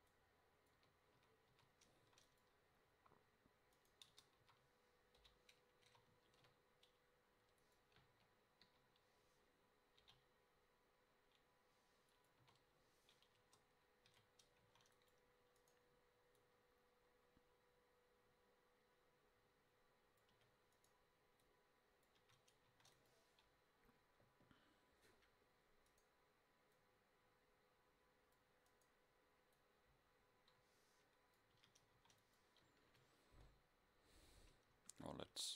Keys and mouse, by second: 0.9 Tab, 1.3 a, 1.6 a, 2.3 ctrl+s, 4.2 Tab, 4.5 a, 5.3 l, 5.9 s, 8.1 KP_7, 8.7 KP_5, 10.1 g, 12.5 KP_0, 13.5 Tab, 14.2 a, 14.7 ctrl+s, 20.4 a, 22.3 a, 22.8 ctrl+s, 26.8 middle click, 27.7-29.6 drag, 30.2 middle click, 31.7 a, 32.0 ctrl+s.